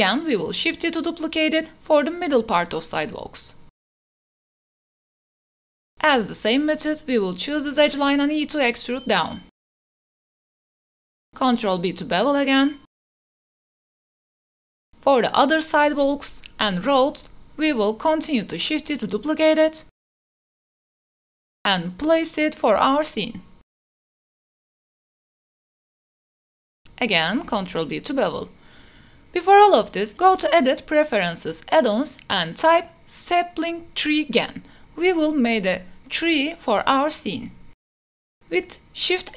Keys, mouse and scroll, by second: 0.1 x, 2.4-4.2 typing, 3.4 click, 3.6 shift+middle click, 3.7 shift+middle click, 5.2 middle click, 5.7 Tab, 6.1-6.4 shift+middle drag, 6.8 2, 7.2-7.9 drag, 7.9 g, 8.0 z, 8.1 e, 8.7 z, 10.1 click, 10.8-11.1 drag, 11.5 ctrl+b, 13.3 Tab, 14.1 shift+middle click, 14.5 shift+d, 14.6 x, 17.4 s, 17.5 x, 18.1 g, 18.2 x, 18.9 Tab, 19.1 click, 19.9 e, 20.5-20.9 drag, 20.5 z, 21.1 shift+middle click, 21.5 g, 21.8 x, 23.6 shift+d, 23.7 x, 25.1 g, 25.2 x, 25.6 middle click, 25.6 KP_0, 25.8 Tab, 26.5 ctrl+b, 27.5 shift+click, 27.9 Tab, 28.8-29.8 drag, 38.3 shift+a.